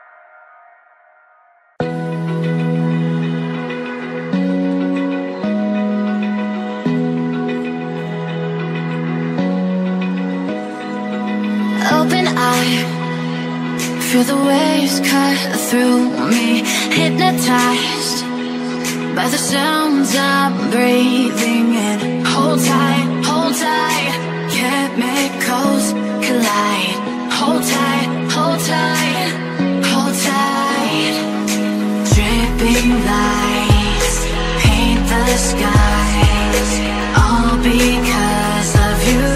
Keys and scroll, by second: 12.7 ctrl+z.